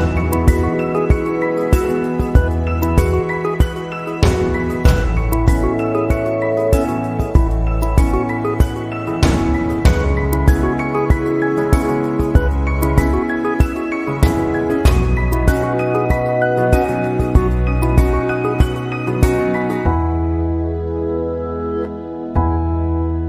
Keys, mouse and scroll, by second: 7.2-7.7 scroll down 2, 7.6-8.1 scroll up 2, 8.1 middle click, 9.8 click, 10.6 middle click, 11.8 right click, 12.7 middle click, 15.3 click, 15.9 click, 17.9-18.3 scroll up 2, 18.3 middle click, 19.6 click, 19.9 click, 20.5 middle click, 21.2-22.6 scroll down 3, 21.6 middle click.